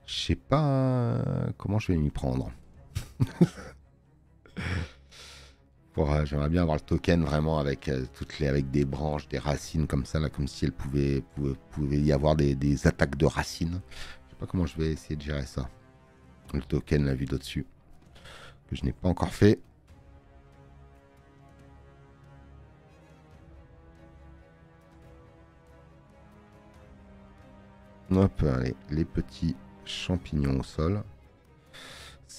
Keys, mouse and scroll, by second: 17.0 click, 17.0 space.